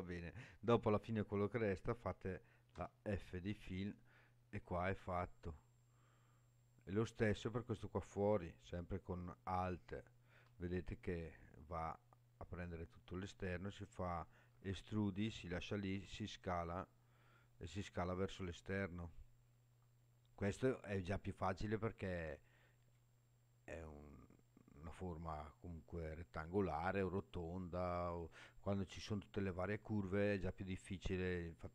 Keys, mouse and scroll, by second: 2.8 f, 3.4 scroll down 1, 5.8-6.5 scroll down 1, 7.5 click, 9.8 alt+click, 14.5 e, 15.6 right click, 15.9 s, 22.8 click.